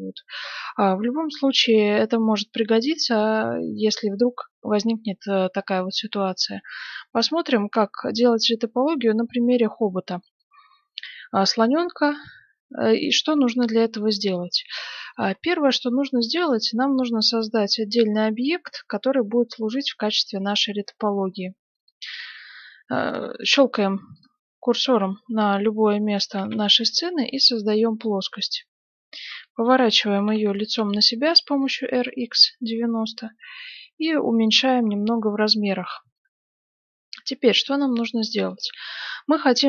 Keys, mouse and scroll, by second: 1.1-2.8 middle drag, 3.9 right click, 8.6-16.6 middle drag, 21.8-26.1 drag, 22.2 shift+a, 26.3 shift+a, 29.2 r, 31.1-33.0 middle drag, 31.9 s, 34.8 middle click, 35.8-38.4 middle drag, 38.6 right click.